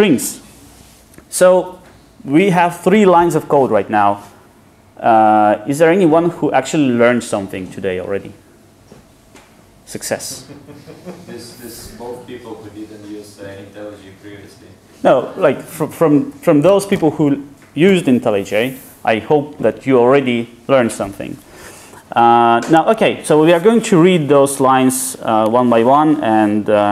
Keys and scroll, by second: 0.0 Return.